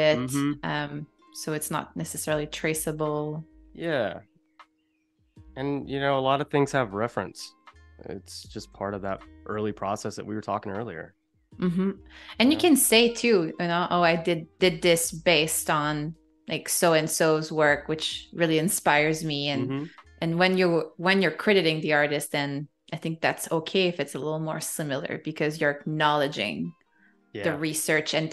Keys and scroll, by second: 2.0 shift+c, 3.3 space, 5.2 space, 7.1 -, 8.6 a, 11.9 space, 13.1 super+-, 15.4 super+=, 16.3 space, 19.0 i, 19.7 a, 25.8 shift+m, 27.3 a.